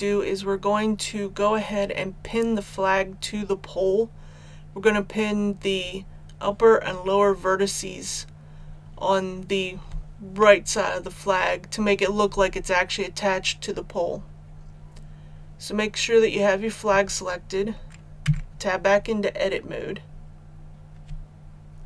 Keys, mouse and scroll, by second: 18.2 Tab.